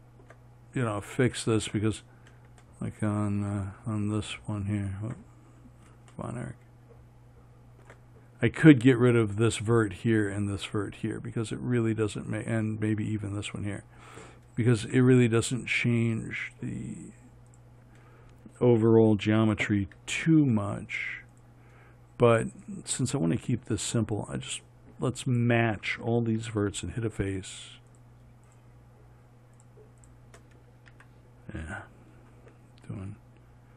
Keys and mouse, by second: 3.1-20.4 middle drag, 20.4 f, 31.4 f, 31.9 right click.